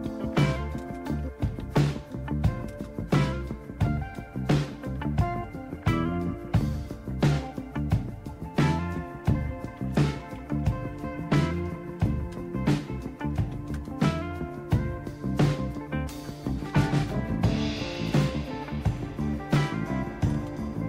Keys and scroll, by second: 0.0-2.7 typing, 4.5-5.7 typing, 9.8-11.1 typing, 12.3-14.0 typing, 16.5-17.2 typing, 19.6 Tab, 19.6 typing, 20.3 Return.